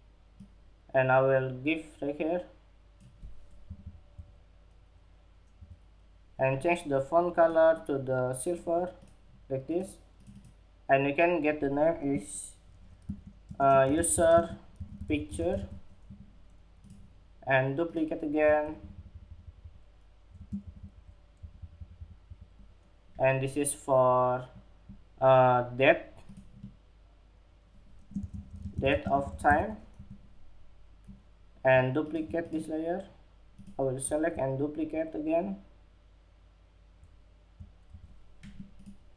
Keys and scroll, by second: 15.4 super+z, 29.3 Escape.